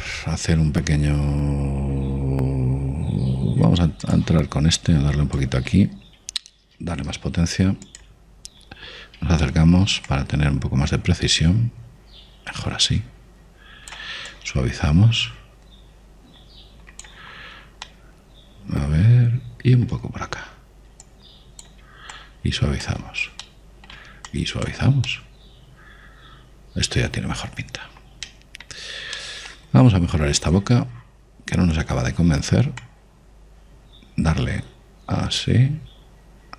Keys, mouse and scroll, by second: 0.8 click, 6.0 click, 7.1 middle click, 8.0 shift+f, 10.6-12.5 middle drag, 11.3 click, 15.5 click, 18.5 middle click, 19.1-20.9 middle drag, 22.3-25.2 drag, 24.7 middle click, 25.5 click, 26.6-28.3 middle drag, 28.6-29.5 scroll down 1, 29.5-30.6 middle drag, 32.4 middle click, 33.3 middle click, 33.4 middle click, 34.1 click.